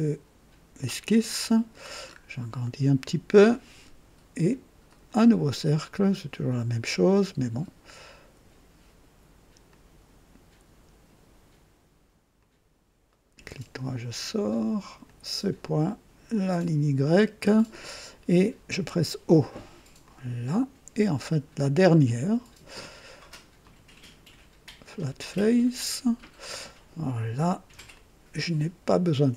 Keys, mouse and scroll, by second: 1.3 middle click, 1.5 right click, 2.0 scroll up 1, 2.6-3.7 right drag, 3.6-3.9 typing, 4.8 click, 7.0 click, 9.6 click, 12.3 click, 13.1 right click, 13.4 typing, 15.0 click, 17.0 click, 18.7 typing, 20.0 click, 22.0 click, 23.6 click, 25.0 click, 27.9-29.3 ctrl+alt+drag.